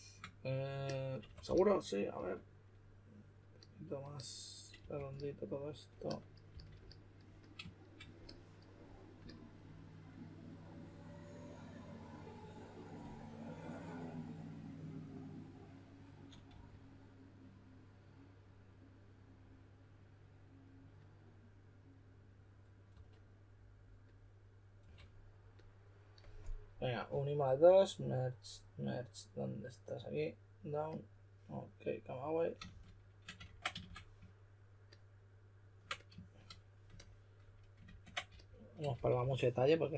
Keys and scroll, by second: 1.0-2.1 typing, 4.7 typing, 6.5 s, 12.9 typing, 16.4 typing, 22.9 typing, 24.8 typing, 32.6 shift+f, 33.4 super+w, 33.8 f, 37.8 super+z, 38.2-39.6 typing.